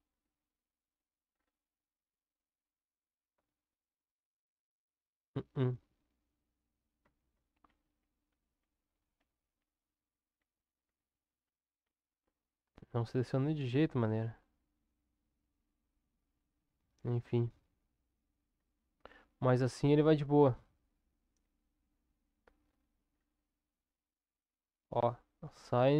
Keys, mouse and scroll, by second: 3.3 Tab, 7.0 Tab, 7.7 ctrl+z, 8.0 ctrl+z, 8.3 ctrl+z, 8.6 ctrl+z, 9.2 ctrl+z, 9.6 ctrl+z, 10.4 ctrl+z, 10.8 ctrl+z, 11.5 ctrl+z, 11.8 ctrl+z, 12.2 ctrl+z, 12.6 ctrl+z, 17.2 Tab, 18.7 click, 20.4 Tab, 21.4 Tab, 21.9 Tab, 24.8 click.